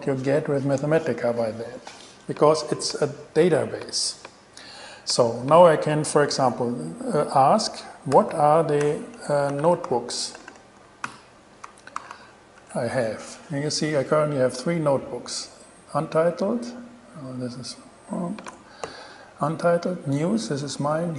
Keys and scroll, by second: 8.1-11.8 typing, 11.9 alt+s, 12.8 alt+shift+Return, 13.5 shift+Return, 18.7 BackSpace.